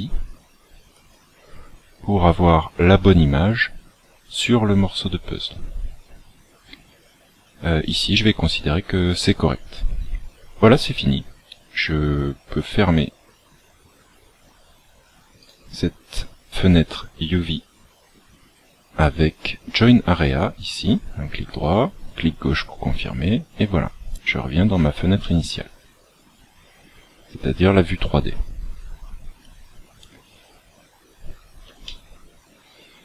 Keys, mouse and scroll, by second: 23.7-24.1 scroll down 3, 25.1 shift+middle click, 31.1 scroll up 3, 31.7 shift+middle click.